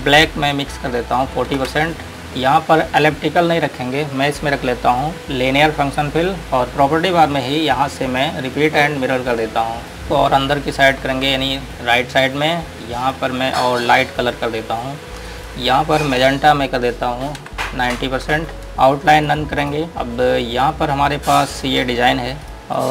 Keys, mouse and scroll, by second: 1.5 KP_4, 1.9 KP_Enter, 5.6 click, 8.2 click, 13.1 click, 17.7 KP_9, 18.7 click, 19.4 right click, 19.9 click, 20.0-21.8 scroll down 1, 21.8 click, 22.6-22.9 scroll up 1.